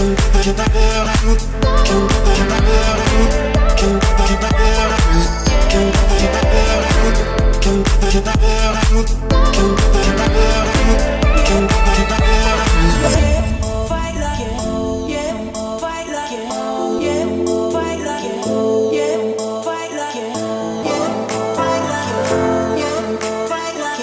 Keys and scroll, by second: 19.4 Escape.